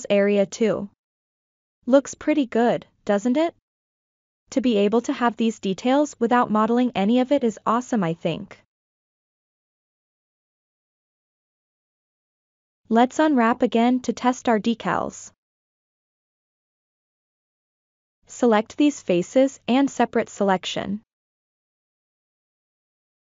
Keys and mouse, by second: 0.1 click, 0.1 s, 0.9 g, 0.9 click, 1.2 ctrl+middle click, 1.3-2.8 middle drag, 2.9 ctrl+middle click, 3.8 ctrl+shift+middle click, 4.3-4.7 drag, 4.7 s, 4.9 click, 5.8 g, 5.9 click, 7.0 ctrl+middle click, 7.4-9.7 middle drag, 10.0 middle click, 11.0 click, 11.3 F7, 11.3 ctrl+middle click, 11.5 shift+middle click, 11.7 middle click, 12.1 a, 12.3 u, 13.0 ctrl+middle click, 13.4 s, 13.7 a, 14.0 click, 14.5 g, 14.6 click, 15.3 ctrl+middle click, 15.5 middle click, 16.3 click, 17.2 shift+click, 17.9 shift+click, 18.3 shift+click, 18.9 shift+click, 19.6 middle click, 22.1 shift+d.